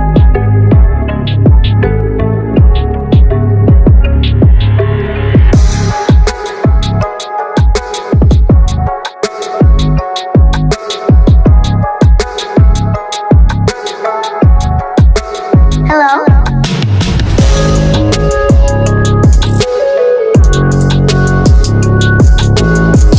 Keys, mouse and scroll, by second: 0.3 click, 1.5 ctrl+z, 1.9 click, 3.8 click, 5.8 click, 7.1 click, 8.0 click, 9.5 click, 11.3-13.7 drag, 14.8 typing, 15.0-17.7 drag, 17.7 ctrl+t, 18.1-19.4 drag, 19.4 shift+click, 20.0 click, 21.4 click.